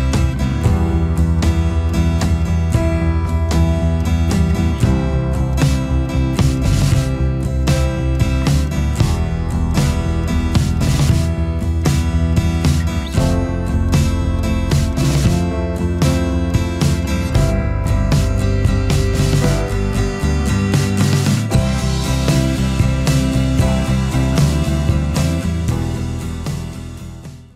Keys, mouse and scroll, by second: 5.2-6.6 alt+scroll up 1, 14.7 alt+scroll down 1, 15.0 space, 24.1 F10.